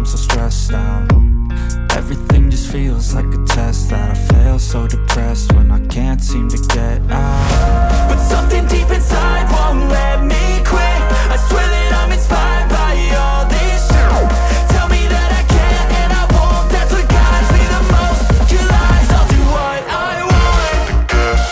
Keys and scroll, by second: 1.4 Return, 3.3-7.9 typing, 6.6 Return, 9.8-12.9 typing, 10.5 KP_Add, 13.0 Return, 13.4 ctrl+s, 18.5 Return, 18.6-21.5 typing.